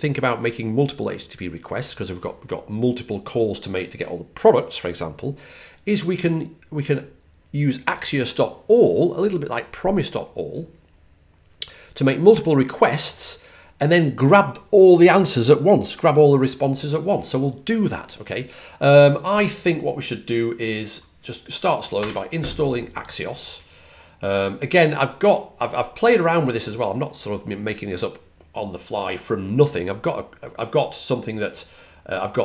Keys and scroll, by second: 21.8 typing.